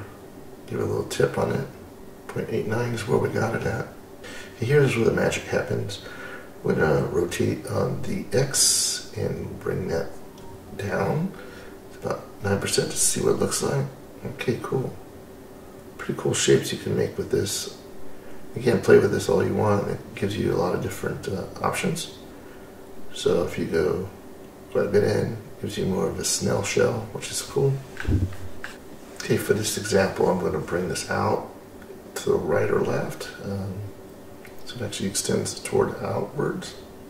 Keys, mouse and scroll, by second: 2.8-4.2 scroll down 2, 9.1-12.5 drag, 13.0-13.7 middle drag, 14.2-15.0 scroll up 4, 15.0-15.6 middle drag, 15.8 middle click, 16.5-16.8 scroll up 3, 19.9-25.5 drag, 26.0-26.5 scroll down 2, 26.5-28.0 middle drag, 28.3-28.7 scroll up 2, 31.0-34.5 drag, 34.9-35.2 scroll down 2, 35.2-37.0 middle drag.